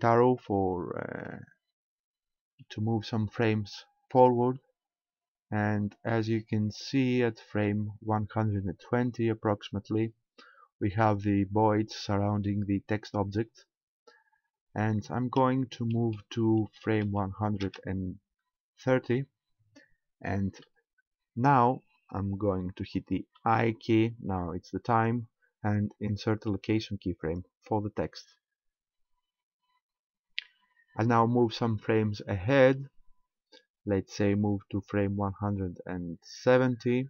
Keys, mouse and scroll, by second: 1.3-2.6 Right, 4.1-7.5 Right, 7.7 Right, 15.5 Right, 15.7 Right, 15.9 Right, 16.1 Right, 16.3 Right, 16.5 Right, 16.7 Right, 17.1 Right, 17.7 Right, 23.4 i, 32.2 click.